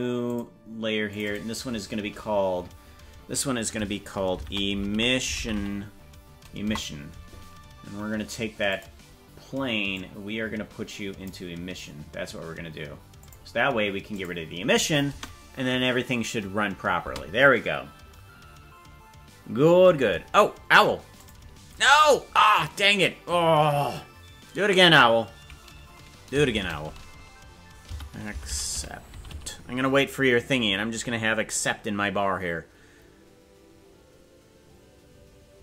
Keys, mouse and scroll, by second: 0.2 click, 1.0 click, 1.2-6.1 drag, 6.3 click, 6.7 click, 8.6 click, 9.9-11.3 drag, 13.1 click, 14.1 click, 15.1 space, 17.1 space.